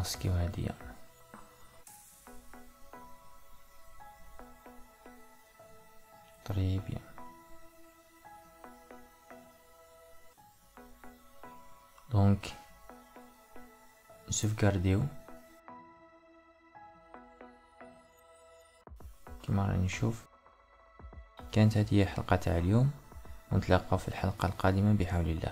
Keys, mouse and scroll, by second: 2.4 click, 6.1-13.7 middle drag, 13.7-16.7 drag, 22.9-25.5 middle drag.